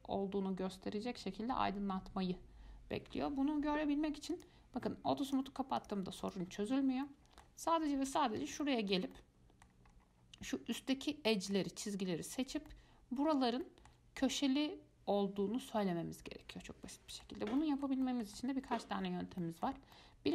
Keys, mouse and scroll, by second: 4.5 click, 5.5 click, 6.0 click, 6.4 click, 7.3-8.3 middle drag, 8.3 Tab, 8.8-10.1 shift+middle drag, 10.1-10.9 scroll up 1, 10.9-11.5 scroll up 1, 11.5-12.6 middle drag, 12.6 scroll down 2, 12.9-19.3 middle drag, 19.3-19.6 scroll up 1, 19.6-20.3 shift+middle drag.